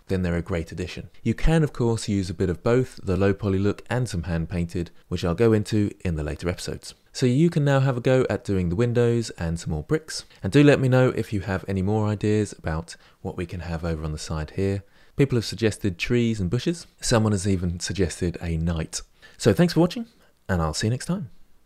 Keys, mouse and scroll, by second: 7.0-7.7 scroll down 5, 7.7-21.6 middle drag.